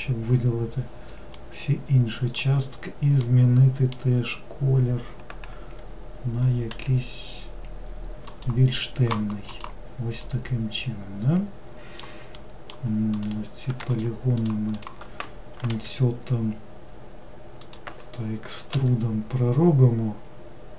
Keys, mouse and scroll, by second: 1.4-6.3 middle drag, 6.7 g, 9.6 click, 10.2-13.2 middle drag, 13.2 click, 14.0 shift+click, 14.4 shift+click, 14.8 shift+click, 18.8 e.